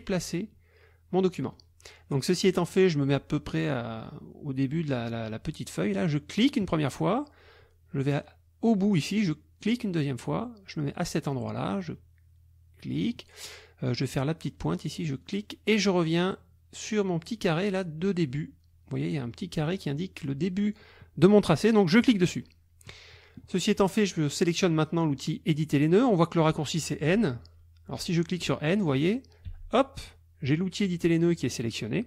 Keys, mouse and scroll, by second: 6.4 click, 9.6 click, 12.9 click, 15.2 click, 22.0 click, 29.5 n.